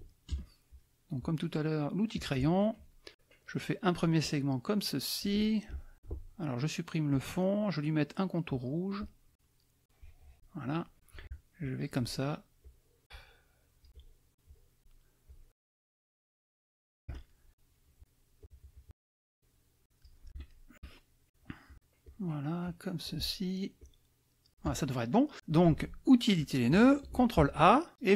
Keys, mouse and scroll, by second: 0.3 KP_Add, 0.7 click, 0.9 middle click, 2.1 click, 2.5 middle click, 4.2-5.4 drag, 7.1 click, 8.5 click, 9.8-10.9 drag, 11.6 shift+click, 12.6 shift+click, 13.5 shift+click, 13.9 shift+click, 14.4 shift+click, 15.2 shift+click, 15.7 shift+click, 16.3 shift+click, 17.2 shift+middle click, 17.5 click, 18.4 shift+click, 19.3 shift+click, 20.5 shift+click, 21.3 shift+click, 22.2 shift+click, 23.1 shift+click, 26.4 click, 27.3 ctrl+a.